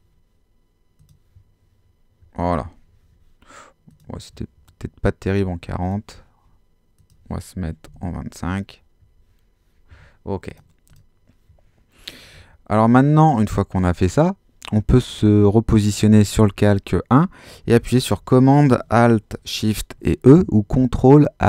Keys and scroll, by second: 7.6-8.5 typing, 12.3 super+-.